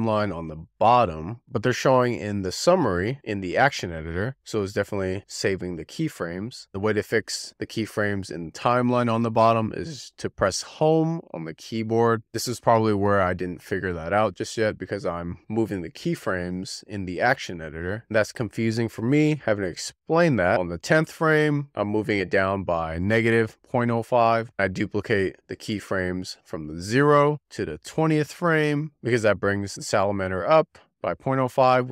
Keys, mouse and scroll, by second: 0.7-3.5 drag, 20.6 click, 23.6 click, 24.7 shift+d, 27.1-30.2 drag.